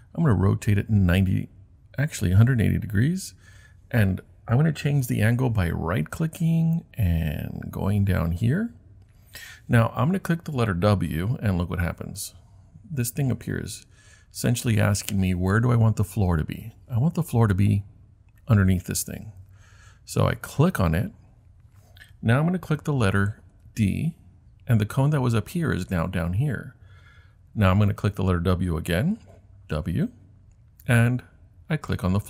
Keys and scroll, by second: 12.0 w, 23.6 d, 29.2 w.